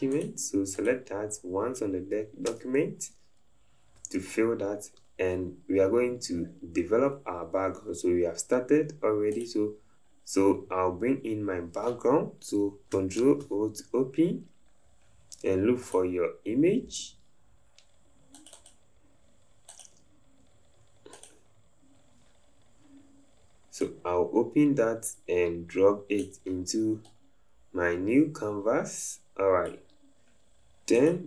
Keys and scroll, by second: 2.5 v, 13.2 ctrl+o.